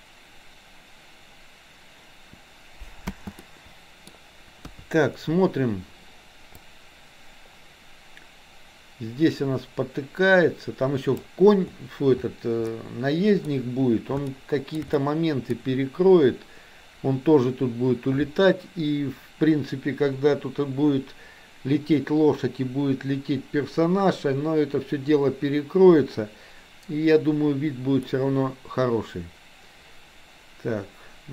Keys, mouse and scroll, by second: 3.1 space, 3.3-4.1 middle drag, 4.7 KP_3, 6.6-11.3 drag, 12.7-13.4 middle drag, 14.4-14.8 shift+middle drag, 14.9 middle click, 28.1-31.3 middle drag.